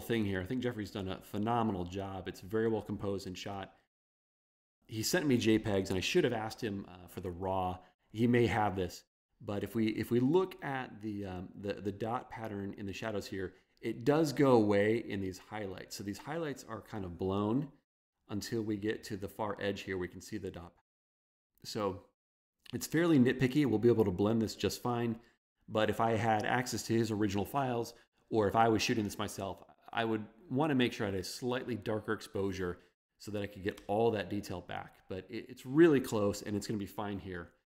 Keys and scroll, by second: 4.5 super+=, 33.9 super+0.